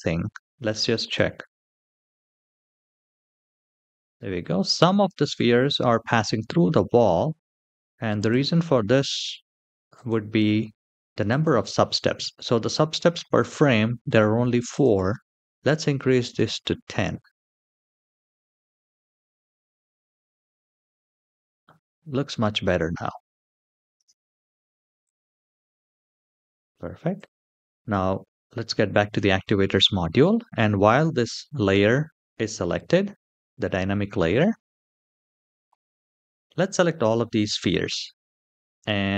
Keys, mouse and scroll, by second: 0.7 click, 4.8 space, 6.1-6.8 shift+middle drag, 7.9 click, 8.6-9.1 scroll up 1, 9.1-9.7 scroll up 1, 9.7 click, 11.0 click, 14.4-16.1 drag, 17.8 click, 18.3 space, 23.7 space, 24.7 click, 26.9 click, 27.7-28.2 scroll down 3, 28.5-28.8 shift+middle drag, 29.2 middle click, 34.6-35.4 drag.